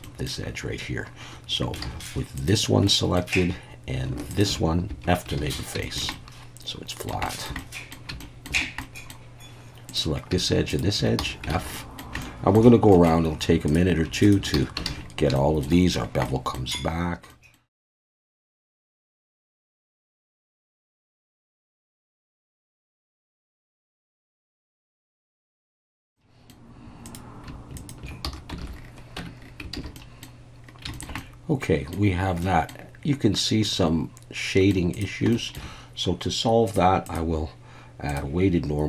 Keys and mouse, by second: 0.0 middle click, 1.9 alt+a, 2.4 click, 2.8 middle click, 4.3 shift+click, 5.3 alt+f, 5.4 alt+a, 5.8 shift+middle click, 6.1 middle click, 7.2 shift+middle click, 7.6 middle click, 8.2 shift+middle click, 8.8 middle click, 9.9 click, 10.7 shift+click, 11.2 f, 11.6 alt+a, 11.7 middle click, 12.2 shift+middle click, 12.9 middle click, 13.7 click, 14.5 f, 14.9 alt+a, 15.3 shift+middle click, 16.2 middle click, 17.3 middle click, 18.0 shift+click, 18.3 f, 18.3 a, 18.6 f, 18.6 middle click, 18.7 middle click, 18.9 shift+click, 19.0 f, 19.1 alt+a, 19.2 shift+middle click, 19.8 alt+f, 19.9 alt+a, 19.9 middle click, 20.0 middle click, 20.3 shift+click, 20.4 shift+middle click, 20.8 shift+click, 20.9 f, 21.1 shift+middle click, 21.3 shift+middle click, 21.4 middle click, 21.8 f, 21.8 alt+a, 21.9 middle click, 22.4 alt+a, 22.4 middle click, 22.7 shift+click, 22.9 alt+a, 22.9 shift+middle click, 23.1 middle click, 23.4 middle click, 23.6 f, 23.7 alt+a, 23.7 middle click, 24.2 alt+a, 24.2 middle click, 24.2 f, 24.3 shift+middle click, 24.8 alt+a, 24.8 shift+click, 25.2 click, 25.6 alt+f, 25.7 alt+a, 25.7 click, 26.1 click, 26.4 shift+middle click, 28.3 f, 28.6 alt+a, 29.2 Tab, 29.7 alt+a, 29.9 middle drag, 30.9 shift+middle click, 31.2-31.9 middle drag, 32.4 middle drag, 33.6-34.7 middle drag, 35.3 shift+middle drag, 36.7 click, 37.1-38.2 drag.